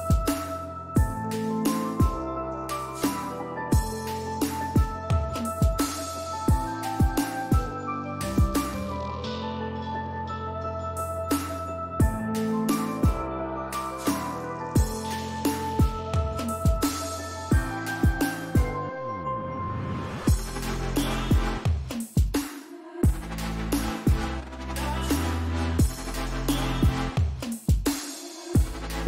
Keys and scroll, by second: 0.8 5, 1.4 Return, 17.6-20.5 typing.